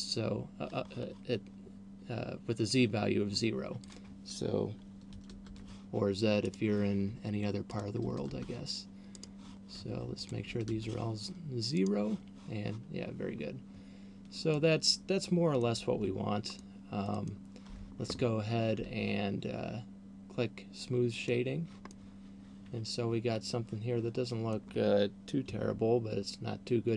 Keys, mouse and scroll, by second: 4.1 click, 6.6 right click, 7.8 click, 9.6 right click, 10.6 click, 12.1 right click, 14.6 middle click, 16.3 Tab, 16.6 middle click, 17.3 middle click, 17.8 Tab, 18.8 Tab, 21.6 click, 22.1 middle click.